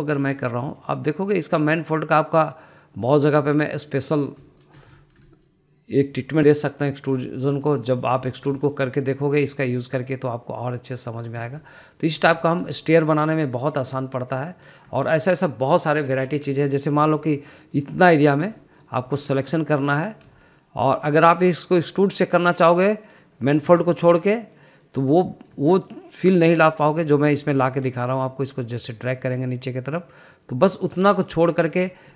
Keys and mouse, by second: 0.1 middle click, 0.8 click, 1.3 shift+click, 1.8 shift+click, 2.3 shift+click, 2.7 middle click, 3.5 click, 5.5 middle click, 6.0 shift+middle click, 6.4 middle click, 6.9 click, 7.4 shift+click, 7.8 shift+click, 8.3 shift+click, 9.4 ctrl+z, 9.9 shift+click, 10.3 middle click, 11.1 click, 12.8 middle click, 13.5 shift+middle click, 13.8 middle click, 14.5 middle click, 15.5 middle click, 16.2 shift+middle click, 17.1 middle click, 17.9 click, 18.4 shift+click, 18.9 shift+click, 19.4 shift+click, 19.7 middle click, 20.4 shift+click, 20.9 shift+click, 21.7 shift+click, 22.1 shift+click, 22.5 shift+click, 23.0 shift+click, 23.6 shift+click, 24.8 ctrl+z, 25.5 shift+click, 25.9 shift+click, 26.9 shift+click, 27.4 shift+click, 27.7 middle click, 28.3 shift+middle click, 28.9 shift+middle drag, 29.8 click.